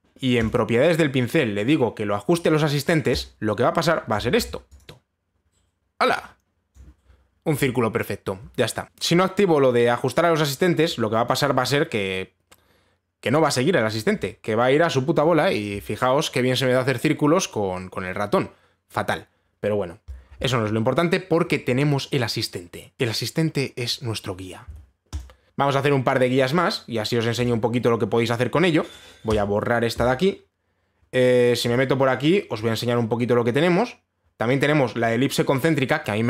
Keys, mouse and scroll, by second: 1.1 click, 3.8 click, 6.8 click, 7.3-10.0 drag, 11.5-14.6 drag, 15.8-19.0 drag, 21.0 click, 25.4 ctrl+z, 25.5 click, 28.1 click, 30.0 click, 32.4 click, 33.3 click.